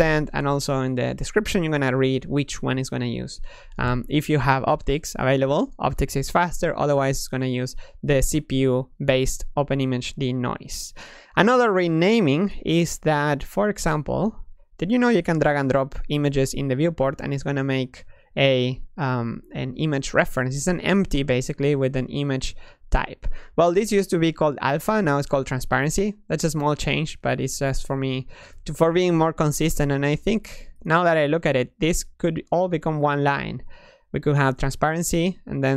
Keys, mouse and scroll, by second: 7.9-11.0 drag, 16.4-17.5 middle drag, 17.5-18.3 scroll up 4, 18.3 middle click, 18.6-21.2 scroll down 1, 21.2 click, 23.3-26.3 ctrl+middle drag, 26.7 click, 27.1 click, 28.3 click, 28.7 click, 29.5 click, 30.4 click, 30.7 click.